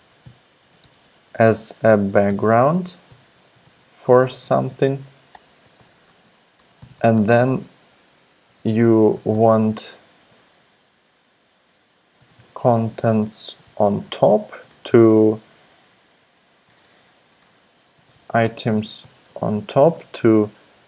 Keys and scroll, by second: 0.0-10.4 typing, 11.9-15.2 typing, 16.6 alt+BackSpace, 16.8 alt+BackSpace, 16.9 alt+BackSpace, 17.4 alt+BackSpace, 17.7-20.8 typing.